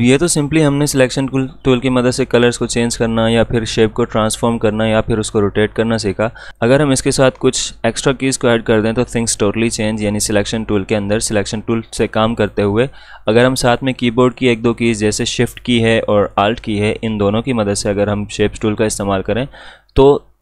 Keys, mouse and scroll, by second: 1.6 click, 6.5 click, 12.4 click.